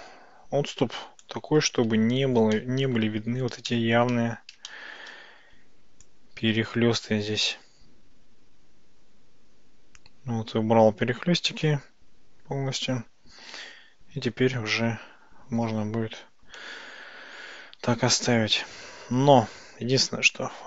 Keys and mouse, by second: 2.6 shift+middle click, 3.8 shift+middle click, 4.8-5.1 shift+middle drag, 6.2-13.0 drag, 19.2 Tab.